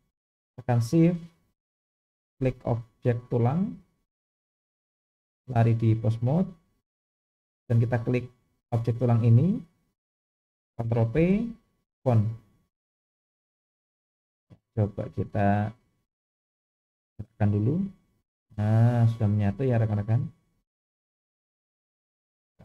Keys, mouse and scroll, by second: 3.5 shift+click, 5.4-6.2 drag, 8.6 click, 11.1 ctrl+p, 15.2 click, 16.7 click, 17.9 g, 22.2-22.6 shift+middle drag.